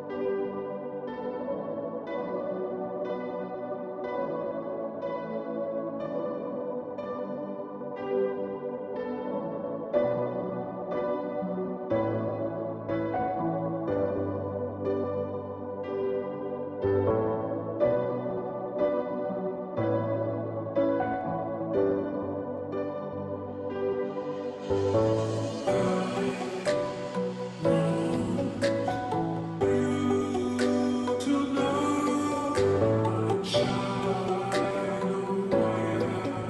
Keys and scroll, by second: 15.2 ctrl+z, 20.5 ctrl+z, 24.7-25.9 ], 26.1 ], 26.4 ], 26.5 ], 28.3 ], 28.5 ], 29.9 ], 30.1 ], 30.8 ].